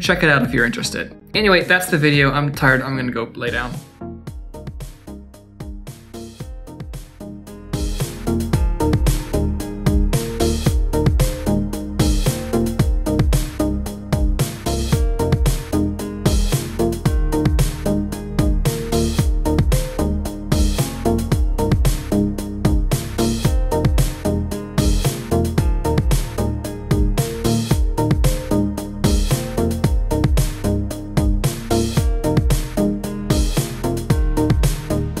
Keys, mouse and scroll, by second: 31.6 click, 31.8 click, 31.9 shift+middle click, 32.2-35.2 typing, 32.4 click, 32.6 shift+middle click, 32.7 click, 32.9 click, 33.1 click, 33.3 click, 33.4 click, 33.6 click, 33.8 shift+middle click, 33.9 click, 34.1 click, 34.2 click, 34.4 click, 34.7 shift+middle click, 34.9 Tab, 34.9 click, 35.0 scroll up 2.